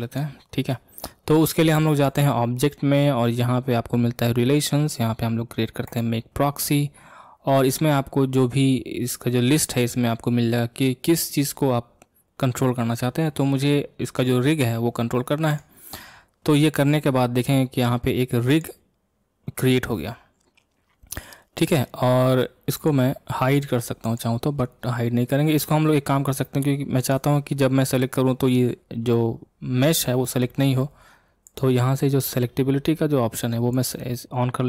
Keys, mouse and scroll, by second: 0.0-5.0 drag, 18.5 click, 22.8 click, 24.0 click, 27.0 click, 31.4-34.5 drag.